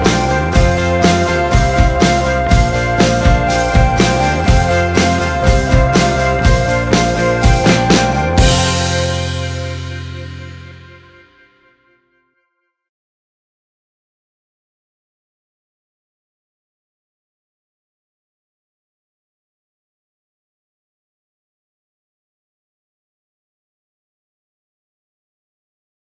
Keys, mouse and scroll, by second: 0.6-2.1 drag, 3.1-4.3 drag, 4.8-6.1 drag, 7.1-8.5 drag, 11.6-13.4 drag, 14.4-16.1 drag, 17.1-19.4 drag.